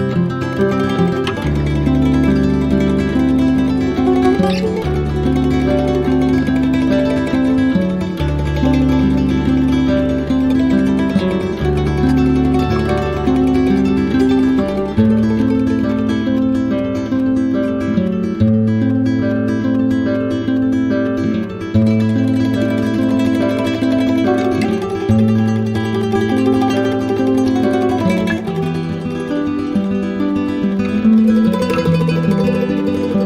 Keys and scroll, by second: 3.7 space, 5.2 space, 7.0 space, 8.7 space, 9.8 space, 10.8 space, 20.4 ctrl+0, 32.4 z.